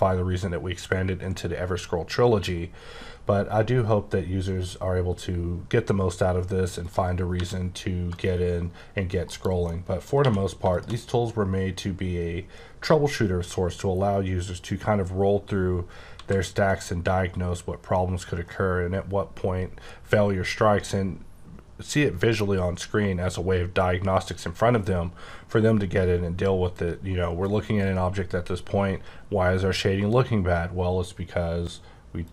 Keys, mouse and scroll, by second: 6.8 click, 7.3 r, 8.1 right click, 9.2 KP_Decimal, 9.6 middle click, 10.2 q, 10.6 shift+click, 11.1-11.5 scroll up 4, 11.5 scroll down 1, 11.6-13.1 scroll up 10, 13.2-13.7 scroll down 10, 14.0-15.2 scroll up 8, 15.2-16.1 scroll down 7, 16.1 z, 16.3-17.8 scroll up 8, 17.8-18.5 scroll down 4, 18.5-19.8 scroll up 5, 19.8-21.0 scroll down 7, 21.6-22.4 scroll up 2, 22.4-24.0 scroll up 6, 24.0-26.4 scroll up 3, 32.2 click.